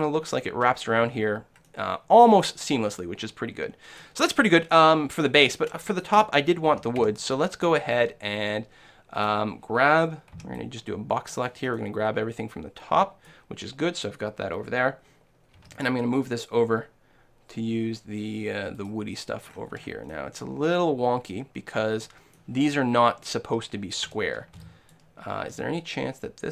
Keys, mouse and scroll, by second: 1.2-4.2 middle drag, 4.7 middle click, 6.8 shift+a, 7.1 shift+a, 8.9 shift+middle click, 10.5 b, 11.8-13.6 middle drag, 15.6 g, 18.9 click, 20.3 click, 20.7-22.2 middle drag, 22.2 click, 24.1 a, 24.6 b, 25.6 s.